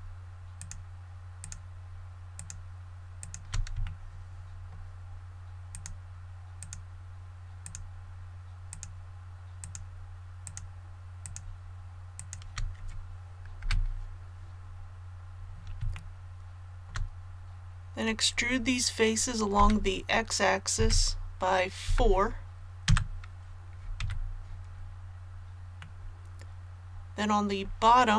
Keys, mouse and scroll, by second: 0.5 shift+right click, 1.4 shift+right click, 2.3 shift+right click, 3.1 shift+right click, 3.8 shift+middle click, 5.7 shift+right click, 6.5 shift+right click, 7.6 shift+right click, 8.7 shift+right click, 9.6 shift+right click, 10.4 shift+right click, 11.2 shift+right click, 12.1 shift+right click, 13.6 KP_7, 14.5 scroll down 1, 15.9 shift+middle click, 17.2-17.8 scroll down 1, 19.5 e, 20.7 x, 21.8 KP_4, 24.0 a, 25.8 middle click, 26.2-26.8 scroll up 1, 26.8-27.8 scroll up 1, 27.8-28.1 scroll up 1.